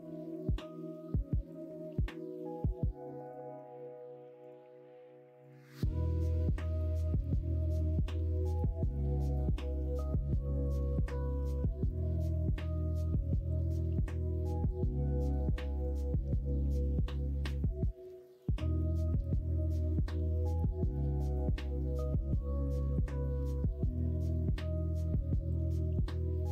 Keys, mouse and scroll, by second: 2.4 click, 3.1 click, 4.3 click, 5.4 click, 9.8 click, 13.0 click, 14.2 middle click, 14.9 middle click, 16.1 ctrl+s.